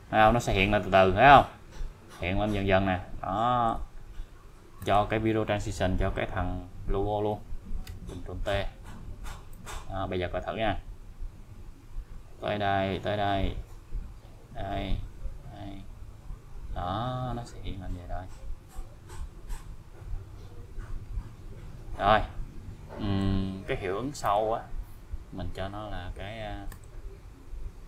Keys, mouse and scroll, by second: 3.9-4.4 scroll up 1, 4.8 click, 7.3 ctrl+click, 7.9 ctrl+t, 9.5-23.3 click, 24.2 click, 26.7 click.